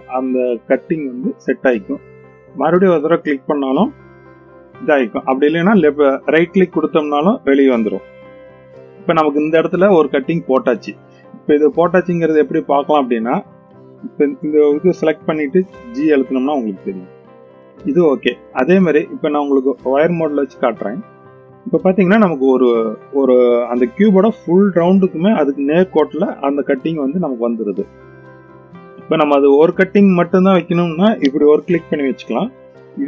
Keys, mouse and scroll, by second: 2.5 click, 9.9-10.7 middle drag, 13.7 click, 14.1 click, 14.8 g, 17.5 middle click, 18.4 click, 18.8 middle click, 20.4 click, 20.6 middle click, 21.8 middle click, 27.0-28.4 middle drag.